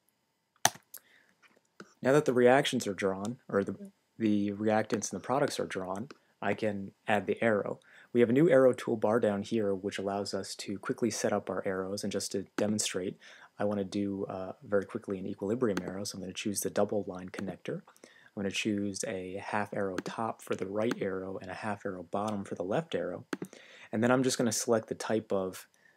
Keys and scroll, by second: 0.0-1.8 typing, 0.6 Return.